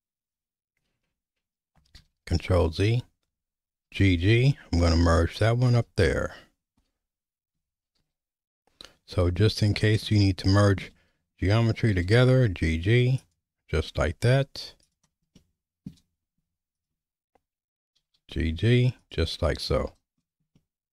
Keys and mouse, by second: 2.0 ctrl+z, 3.9 g, 8.0 ctrl+z, 9.5 click, 10.1 middle click, 12.0 g, 14.8 click, 15.3 shift+middle click, 16.7 ctrl+click, 18.0 g, 20.6-20.9 shift+middle drag.